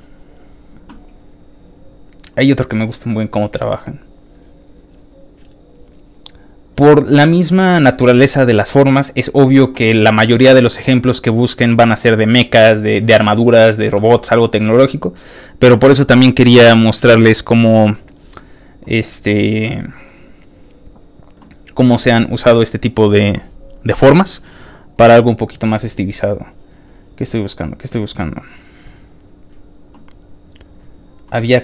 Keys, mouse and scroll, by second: 0.4-1.4 scroll down 3, 1.4-1.9 scroll down 3, 4.2 scroll down 1, 4.9-6.2 scroll down 4, 6.7-7.3 scroll down 1, 7.8 scroll down 1, 8.5 scroll down 2, 12.7 scroll down 1, 13.5-13.9 scroll down 1, 14.2-15.5 scroll down 4, 16.8 click, 18.0 click, 19.9 scroll down 2, 20.5 click, 24.5 scroll down 2, 27.2 scroll down 1, 28.1 scroll down 1, 29.3 scroll down 1, 30.1 scroll down 2, 30.8 scroll down 1.